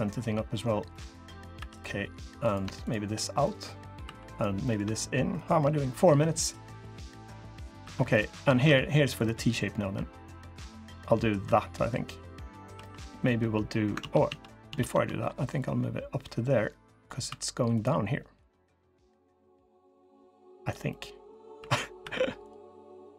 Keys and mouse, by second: 0.7 click, 1.3 3, 3.8 2, 4.4 click, 7.0 click, 7.6 3, 8.3 ctrl+r, 11.2 3, 11.3 click, 12.5 2, 13.7 ctrl+z, 14.0 ctrl+z, 14.4 ctrl+z, 15.5-17.0 drag, 17.0 2, 20.0-21.1 drag, 21.3 3, 21.8 1.